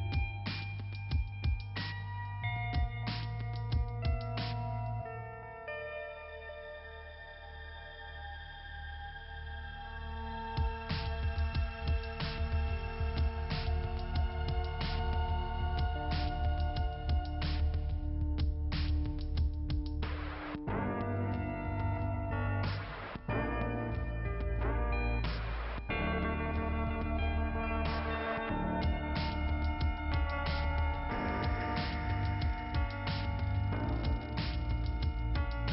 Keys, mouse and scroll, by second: 7.1 click, 8.0 click, 8.2 click, 8.8 click, 8.9 click, 9.6 right click, 10.4 click, 11.3 click, 11.6 click, 12.9 click, 13.5 click, 13.6 click, 14.1-14.8 scroll down 2, 14.8 click, 16.0 scroll down 1, 17.9 middle click, 18.7 click, 19.6 click, 21.6 scroll up 2, 22.5 scroll down 1, 23.5 click, 24.4 click, 25.5 click, 25.7 click, 25.8 click, 26.9 click, 27.7 click, 30.4 click, 32.6 scroll up 2, 33.9 middle click, 34.9 click.